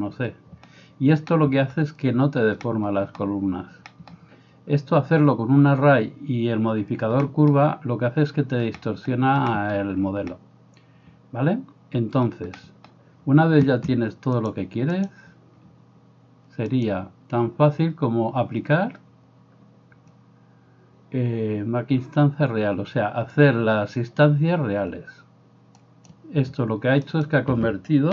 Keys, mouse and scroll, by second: 14.5-28.1 drag, 27.1 right click.